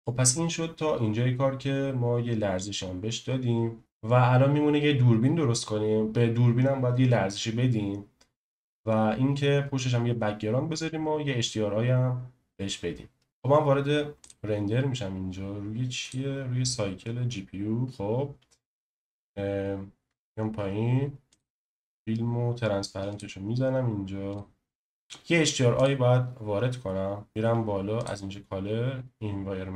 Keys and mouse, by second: 0.0 space, 3.8 space, 21.3 click, 23.1 click, 24.3 click, 28.1-29.7 drag.